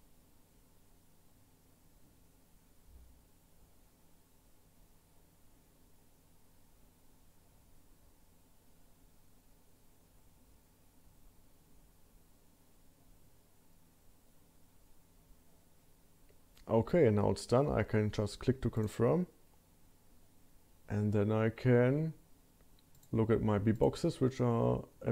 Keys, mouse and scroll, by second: 22.9 click, 23.7 click.